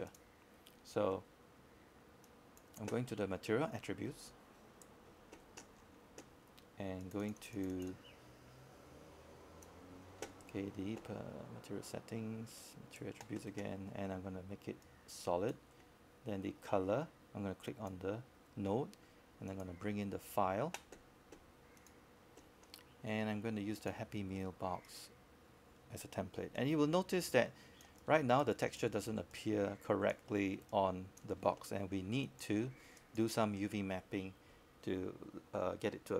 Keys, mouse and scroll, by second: 1.9-4.4 alt+drag, 6.7 alt+click, 7.4 alt+middle click, 7.7 alt+click, 8.1 alt+middle click, 8.4 alt+click, 8.8 right click, 9.6 click, 10.9 right click, 11.9 click, 16.6-19.2 right drag, 19.4-19.8 scroll up 1, 20.6-24.0 drag, 24.0-27.2 right drag, 28.5 click.